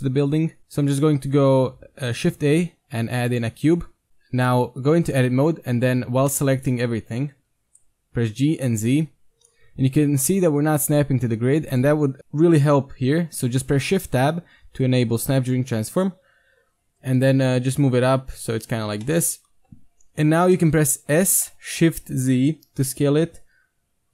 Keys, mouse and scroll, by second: 0.6 shift+a, 4.1 KP_1, 4.1 KP_5, 4.7 Tab, 7.4 KP_1, 8.0 g, 13.8 shift+Tab, 16.8 g, 19.0-21.2 middle drag, 21.2 s.